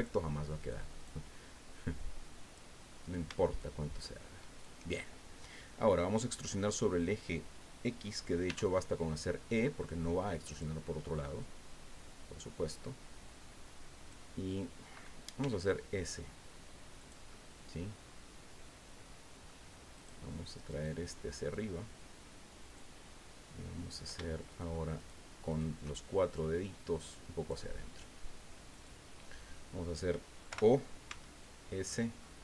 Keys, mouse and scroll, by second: 0.6 right click, 1.0 right click, 2.0 click, 3.0 shift+right click, 3.5 shift+right click, 4.0 shift+right click, 4.6 shift+right click, 4.9-5.7 shift+scroll down 3, 5.7 click, 8.5 e, 10.5 click, 11.4-14.3 drag, 15.4 s, 17.0 click, 17.3-19.6 middle drag, 19.9 right click, 20.7 right click, 21.5-22.9 drag, 24.5 shift+right click, 25.0 shift+right click, 25.5 shift+right click, 26.3-27.7 drag, 28.7 right click, 30.5 o, 31.1 s, 31.8-32.4 scroll up 7.